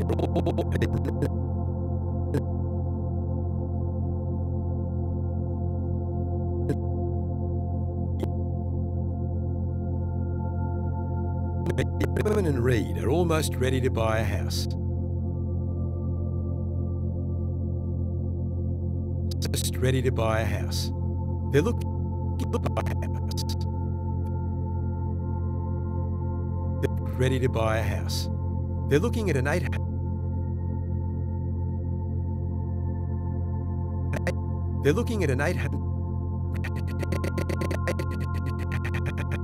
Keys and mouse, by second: 2.2 click, 3.8 g, 5.1-5.9 drag, 6.5-9.4 drag, 9.4 g, 10.6 click, 11.0-11.8 drag, 12.2 space, 14.6 space, 16.4-17.5 drag, 17.5 shift+d, 18.7-19.9 drag, 19.5 space, 21.6 space, 22.3-24.3 drag, 25.1 shift+d, 26.3 click, 26.8 click, 27.0 space, 29.6 space, 30.9 click, 32.2 shift+d, 33.5-34.7 drag, 33.7-34.3 typing, 35.6 typing, 36.4 click.